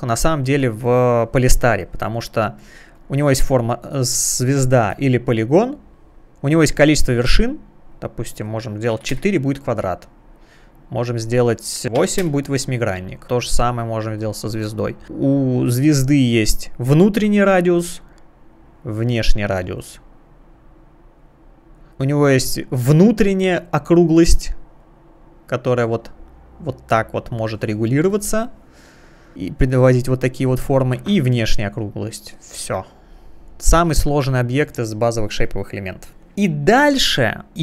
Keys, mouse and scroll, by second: 0.5 space, 1.1 space, 3.0 click, 4.9 click, 7.5 click, 9.0 4, 9.1 Return, 11.4 click, 12.1 8, 12.2 Return, 13.7 click, 14.2 click, 14.3 double click, 17.7 click, 18.5 click, 20.9 click, 23.0 click, 30.5 click, 31.5 click, 33.3 click, 34.5 click, 37.0 click.